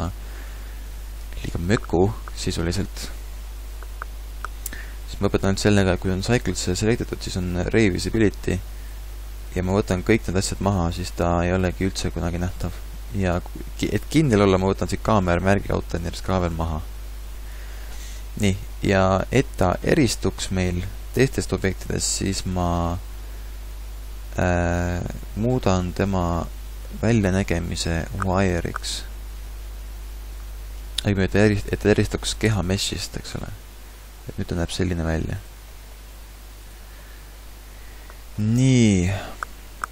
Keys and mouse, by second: 8.5-13.2 drag, 13.2-14.8 middle drag, 14.8-16.7 drag, 18.2-19.3 middle drag, 32.9 a, 36.1 g, 39.3 middle click, 39.8 a.